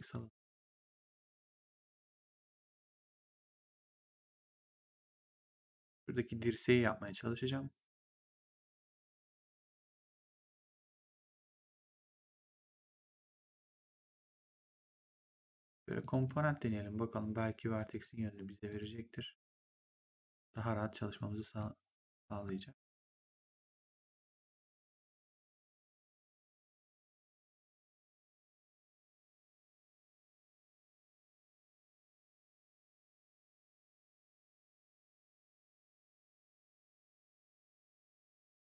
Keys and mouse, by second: 7.0 click, 10.5 click, 14.1 click, 15.9 click, 17.8 click, 21.1 click, 22.3 click, 23.9 click, 26.3 click, 28.9 click, 30.9 click, 32.7 click, 35.3 click, 36.5 r.